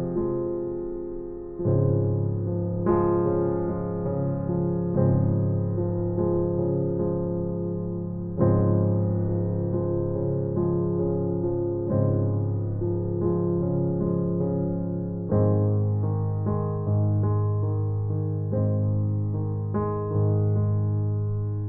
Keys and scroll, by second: 5.8 space, 11.1 space.